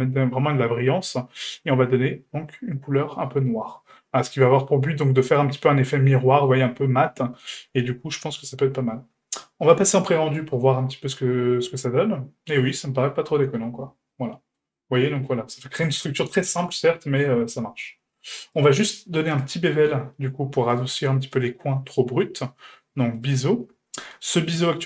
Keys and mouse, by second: 10.3-13.3 drag, 13.4 Tab, 14.1-14.6 middle drag, 14.9-15.5 middle drag, 15.9 shift+middle drag, 16.9-17.2 shift+middle drag, 18.5 middle click, 19.5 middle click, 20.7 click, 21.3-23.3 drag, 24.1-24.8 ctrl+middle drag.